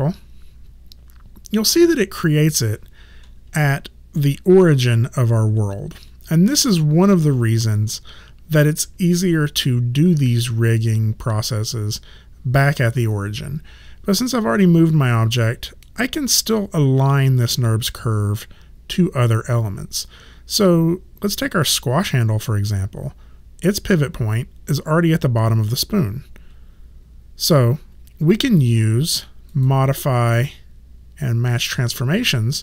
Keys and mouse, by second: 3.6 click, 6.3 alt+right click, 8.0 alt+click, 21.4 click, 29.5 click.